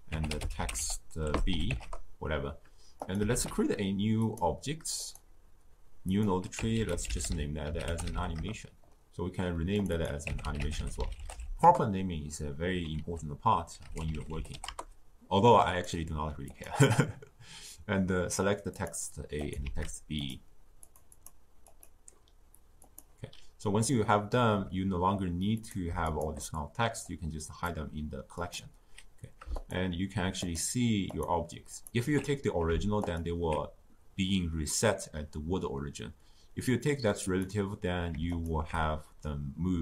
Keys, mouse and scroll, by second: 2.9 click, 3.2 shift+a, 4.9-9.1 drag, 9.7 click, 9.9-12.9 drag, 12.9 ctrl+a, 16.4 click, 19.3 click, 19.6 shift+d, 20.7 click, 21.6 click, 25.5 click, 26.0 shift+click, 26.5 drag, 28.3 click, 29.5 alt+shift+click, 30.4 alt+shift+click, 31.0 alt+shift+click, 31.7 alt+shift+click, 32.9 alt+shift+click, 37.2 click, 38.3 alt+shift+click.